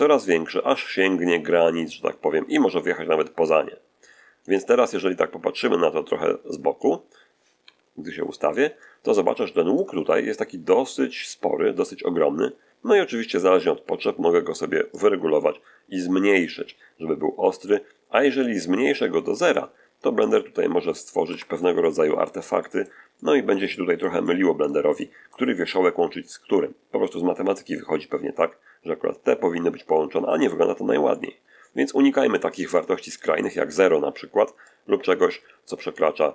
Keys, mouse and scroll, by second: 7.5 1, 9.1 shift+middle click, 14.8-19.4 drag, 20.1 click, 21.2 Escape, 21.7-22.9 middle drag, 22.4-22.9 scroll up 1, 23.0-24.7 middle drag, 24.9 shift+middle click, 27.1-27.4 scroll up 1, 31.0-32.4 middle drag, 32.6-33.8 middle drag, 34.5-36.0 drag, 36.1-36.3 scroll down 2.